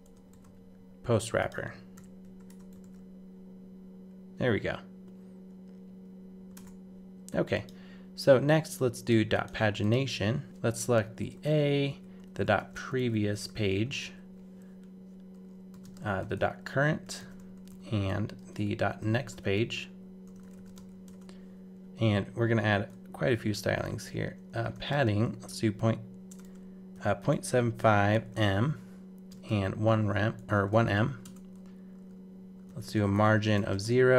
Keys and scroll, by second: 0.3 super+v, 1.9 super+[, 2.2 super+s, 2.5 super+Tab, 2.8 super+r, 6.5 super+Tab.